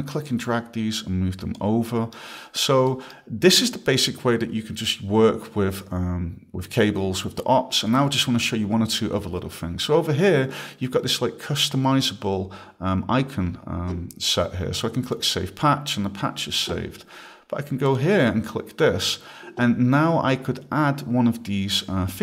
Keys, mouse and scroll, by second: 0.2 click, 1.9 right click, 2.5 scroll, 2.9 right click, 15.0 click, 17.9 click.